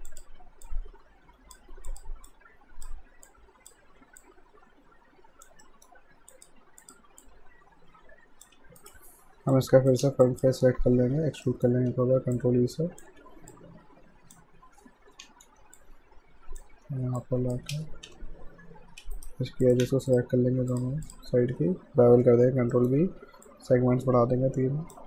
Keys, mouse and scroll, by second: 5.6 alt+middle click, 6.3 click, 8.6 q, 8.8 right click, 9.5 click, 10.3 ctrl+click, 11.0 ctrl+e, 11.5 alt+middle click, 11.9 w, 12.4 click, 13.1 r, 13.5 click, 14.9-19.0 typing, 15.8 click, 17.2 click, 19.2 right click, 19.6 click, 20.1 shift+click, 22.1 ctrl+b, 22.8 middle click, 23.5 click.